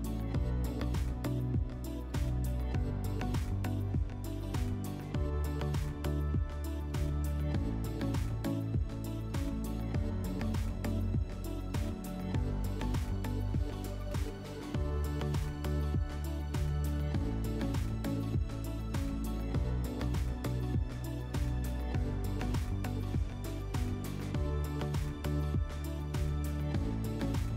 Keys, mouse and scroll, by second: 5.0 click, 6.9 click, 7.4-8.5 typing, 9.3 Return, 10.9 typing, 15.5-16.9 drag, 22.9 alt+middle click, 24.0-25.5 middle drag.